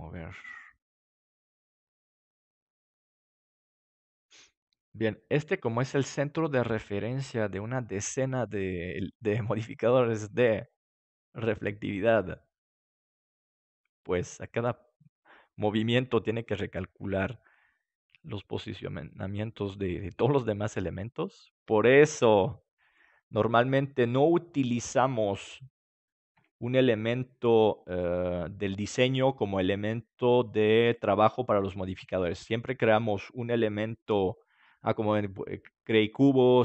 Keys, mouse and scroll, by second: 26.3 KP_7, 26.9-29.9 middle drag.